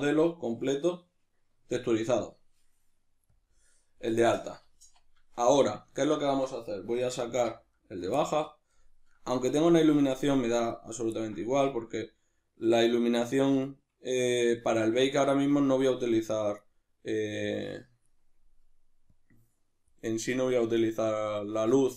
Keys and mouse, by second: 3.3-4.3 drag, 4.3-10.7 ctrl+middle drag, 4.7 z, 7.2 alt+h, 10.7 right click, 11.2-16.0 ctrl+middle drag, 11.7 z, 15.1 z, 16.0 right click, 17.3-21.9 drag.